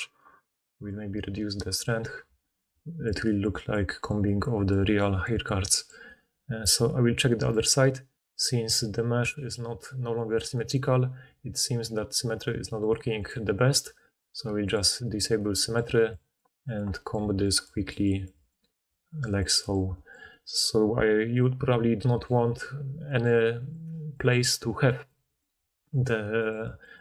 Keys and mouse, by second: 2.2 f, 2.5 middle click, 2.7-6.2 drag, 6.2-9.1 right drag, 9.1-14.7 drag, 14.7-16.1 middle drag, 16.1-17.5 drag, 17.1 f, 17.5 middle click, 17.6-27.0 drag.